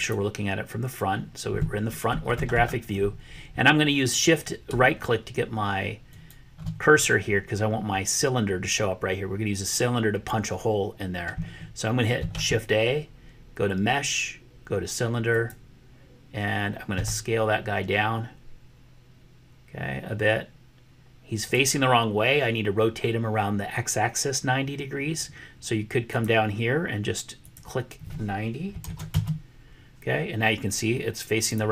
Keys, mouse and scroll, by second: 0.0 click, 6.0 shift+click, 12.3 shift+a, 17.0 s, 17.7 middle click, 26.0 click, 27.5-31.0 drag.